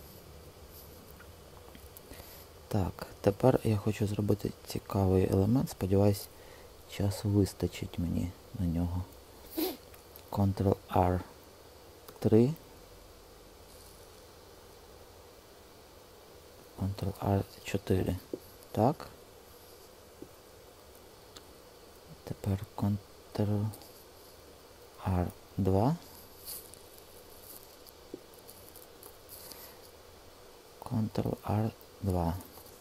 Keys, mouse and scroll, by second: 1.3 typing, 10.7 ctrl+r, 16.9 ctrl+r, 24.8 ctrl+r, 28.8 Return, 31.2 ctrl+r.